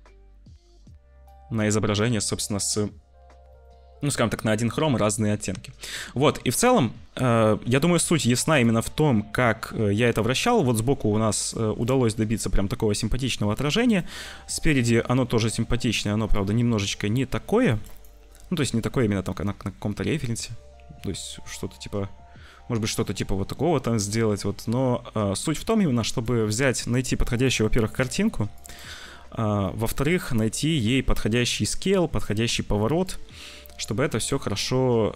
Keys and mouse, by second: 1.8 middle click, 3.5 shift+middle click, 3.9 shift+click, 13.5 click, 13.8 click, 14.6-16.3 middle drag, 16.5 ctrl+z, 17.9-19.4 middle drag, 25.2 middle click, 26.5 middle click, 29.7 click, 30.8 click, 31.6 middle click, 32.9-34.1 middle drag, 34.1-35.1 drag.